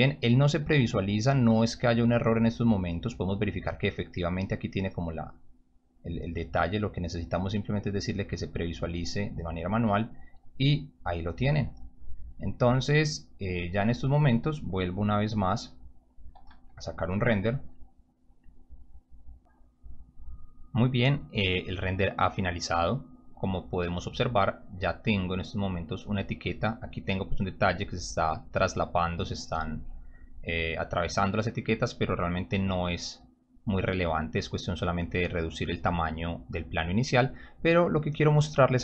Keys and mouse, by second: 2.1 click, 2.9 click, 3.0 click, 7.0 click, 8.0 click, 13.7 click, 16.3 p, 23.3 click.